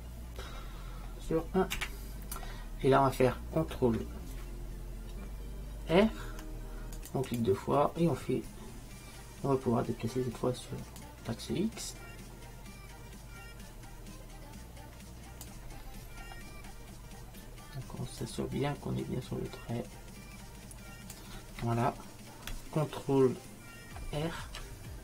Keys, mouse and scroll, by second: 6.0 ctrl+r, 11.1-12.9 drag, 16.3-18.3 middle drag, 18.3-20.2 drag, 24.5 ctrl+r.